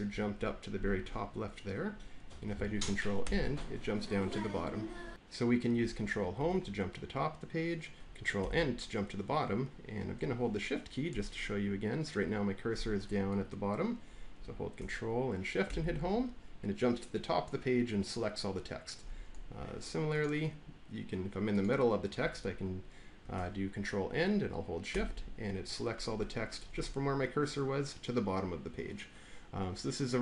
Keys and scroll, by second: 3.1 ctrl+End, 6.3 ctrl+Home, 8.3 ctrl+End, 15.6 ctrl+shift+Home, 24.8 ctrl+shift+End.